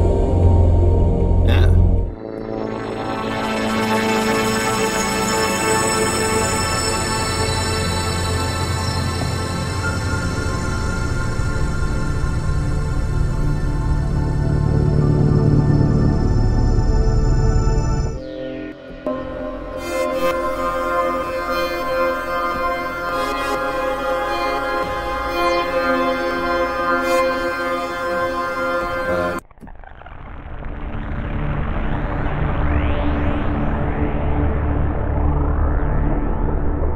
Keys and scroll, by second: 4.8 F2.